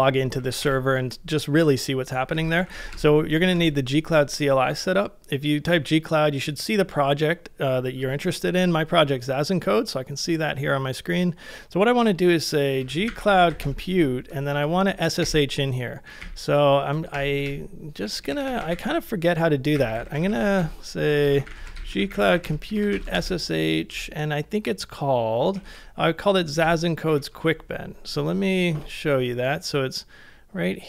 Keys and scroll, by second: 0.0-3.5 typing, 12.6-14.0 typing, 15.2 Return, 16.2 Up, 17.1 Return, 17.2 Return, 17.4 Return, 17.7-18.8 Return, 19.5-20.8 typing, 25.6 super+Tab, 26.6 super+Left, 27.1 super+Right.